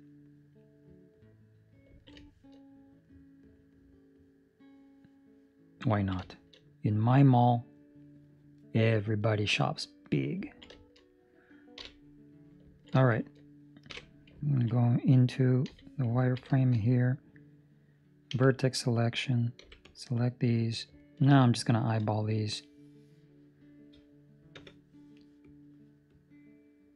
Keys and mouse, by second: 1.8 ctrl+middle click, 2.1 shift+middle click, 2.6 middle click, 5.8 ctrl+middle click, 6.2 shift+middle click, 6.5 middle click, 7.0 middle click, 7.4 shift+middle click, 10.4 ctrl+middle click, 10.7 shift+middle click, 11.7 KP_3, 12.6 ctrl+middle click, 13.2 shift+middle click, 13.8 KP_5, 14.4 ctrl+middle click, 15.6 z, 16.1 ctrl+middle click, 19.5 c, 21.0 ctrl+middle click, 21.3 shift+middle click, 25.4 click, 26.0 click.